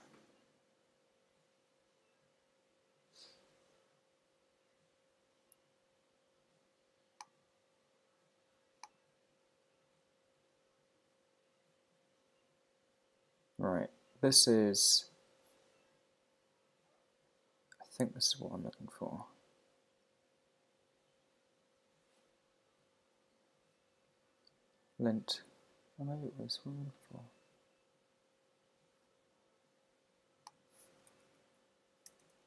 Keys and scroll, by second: 31.1 Down, 31.4 Right.